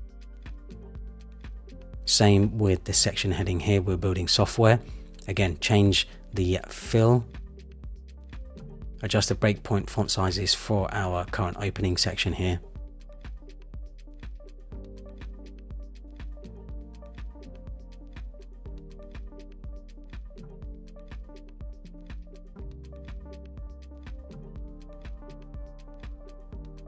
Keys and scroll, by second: 4.6 Return, 18.5 Up, 23.9 Up, 24.7 super+=.